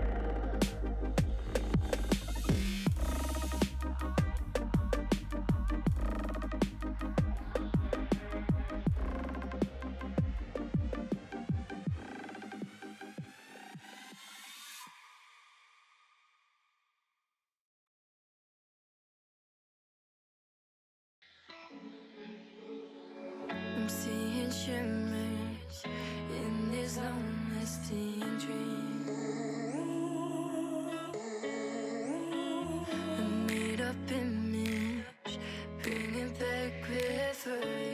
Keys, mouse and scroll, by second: 1.8 3, 1.9 click, 2.8 g, 13.8 shift+middle click, 14.3 alt+z, 14.6 click, 14.9 alt+z, 15.3 g, 17.4 g, 19.8 click, 19.8 shift+middle click, 20.4 KP_3, 20.9 KP_1, 21.1 alt+z, 21.6 click, 21.6 shift+middle click, 21.8-22.6 scroll up 2, 22.6 click, 23.1 h, 23.4 ctrl+z, 23.6 g, 26.3 shift+click, 27.5 shift+click, 28.0 scroll down 1, 28.1 click, 28.1 middle click, 28.7 KP_1, 28.9-29.4 scroll up 3, 29.4 s, 32.7 s, 33.8 g, 35.7 s, 36.6 scroll down 4, 36.8 middle click, 37.0 alt+z, 37.2 shift+middle click, 37.5-37.9 scroll up 1.